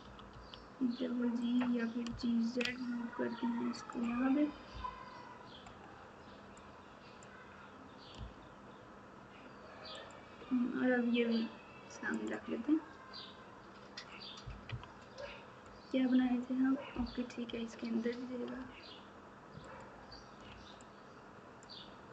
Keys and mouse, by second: 4.7 KP_7, 6.9 click, 8.1 g, 14.6 KP_3, 16.9 KP_7, 18.5 g, 20.5 alt+z.